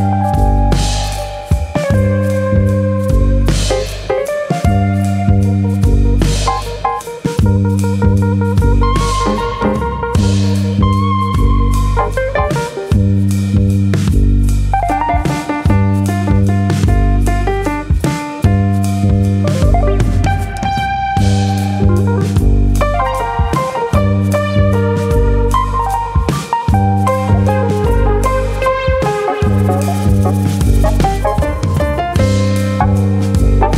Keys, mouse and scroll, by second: 0.2 click, 1.6 s, 2.9 right click, 3.2-3.8 scroll up 3, 3.4 shift+middle click, 3.9 s, 4.9 click, 6.0 e, 8.5 click, 8.7 s, 10.6 click, 13.1 middle click, 15.9 middle click, 16.5 middle click, 19.9 middle click, 21.9 middle click, 23.2 2, 23.9 click, 25.1 click, 26.1 shift+click, 27.3 shift+click, 27.3 f, 31.3 KP_Divide, 32.1-32.5 scroll up 2, 32.5 middle click, 32.9 shift+middle click.